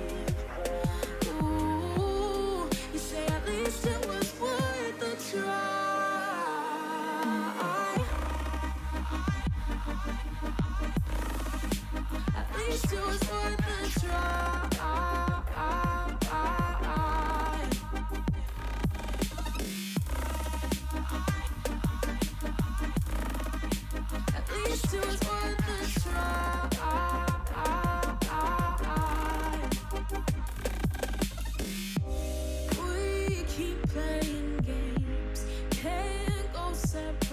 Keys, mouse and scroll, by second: 0.5 shift+click, 1.4 alt+z, 1.6 x, 2.4 shift+middle click, 3.3 scroll up 3, 3.8 ctrl+z, 5.2 ctrl+r, 8.6 g, 9.4 shift+d, 10.2 h, 10.5 click, 11.0 shift+click, 11.4 x, 12.2 click, 12.7 shift+click, 12.9 x, 13.9 alt+h, 15.0 ctrl+r, 16.6 ctrl+r, 17.5-18.8 drag, 17.5 middle click, 18.8 Tab, 19.6 ctrl+i, 19.7 h, 20.4 click, 20.6 middle drag, 20.7 Tab, 20.9-22.3 middle drag, 22.3 l, 22.8 h, 23.0-23.4 middle drag, 23.4-23.9 scroll up 1, 23.9 ctrl+r, 25.5 ctrl+l, 27.8 scroll down 1, 27.9-28.7 middle drag, 28.7 click, 29.1 3, 29.2 click, 29.6 x, 30.1-30.7 middle drag, 30.7 ctrl+z, 30.8-31.5 middle drag, 31.5 click, 31.7 middle click, 32.0 ctrl+z, 32.8 ctrl+r, 34.0 click, 34.1 middle click, 34.7-35.4 scroll up 1, 35.4 ctrl+z, 35.7 ctrl+z, 35.9 ctrl+z, 36.2 ctrl+z, 36.4 ctrl+z, 36.8 ctrl+z, 37.0 ctrl+z.